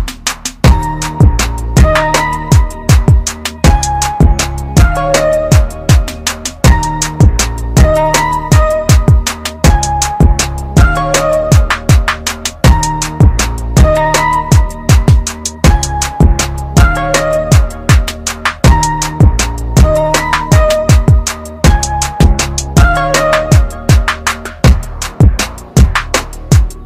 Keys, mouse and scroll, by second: 12.6 click, 15.4 click, 18.3-20.1 scroll down 1, 21.3 shift+click, 23.4 shift+right click, 25.3 click, 26.0 scroll up 1.